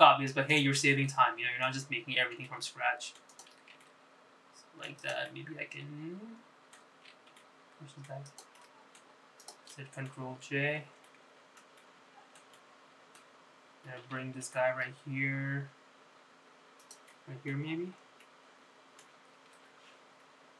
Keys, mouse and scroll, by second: 1.9 middle click, 3.5 s, 4.9 g, 6.4-7.9 middle drag, 8.4 g, 9.7 middle click, 10.5 shift+click, 10.9 middle click, 11.9 ctrl+j, 12.2 middle click, 12.9 alt+middle click, 13.7 middle click, 14.6-15.3 scroll down 3, 15.6 g, 18.2 middle click, 18.8-19.1 scroll up 4, 19.3 middle click.